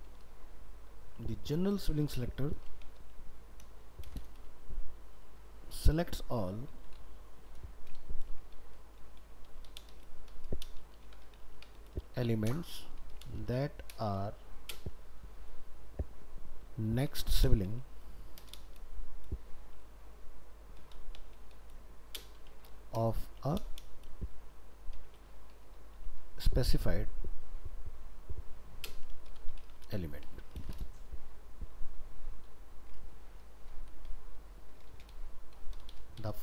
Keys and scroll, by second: 1.9 ctrl+shift+Right, 33.0 ctrl+s.